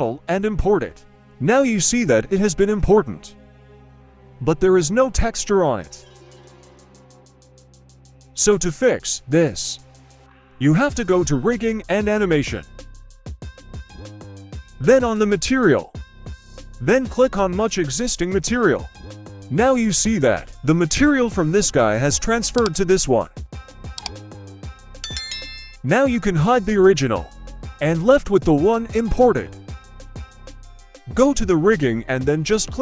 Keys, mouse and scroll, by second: 0.1-2.4 middle drag, 2.6-3.2 scroll down 2, 2.9-3.2 middle drag, 5.9 middle click, 6.9-7.7 scroll down 2, 7.7-8.9 scroll down 4, 8.9-9.3 scroll down 1, 9.3-9.6 drag, 10.3-11.1 scroll down 1, 11.1-12.3 scroll down 1, 12.8 click, 13.3-15.9 scroll down 4, 15.9-16.7 scroll down 2, 16.7 click, 22.7 click, 24.5-25.7 drag, 26.0 middle drag, 26.4-27.0 scroll up 1, 27.0 scroll up 1, 27.1 shift+middle drag, 27.7 right click, 28.8-29.6 scroll down 3, 30.6 middle click, 30.6 right click, 30.6-32.4 scroll down 1.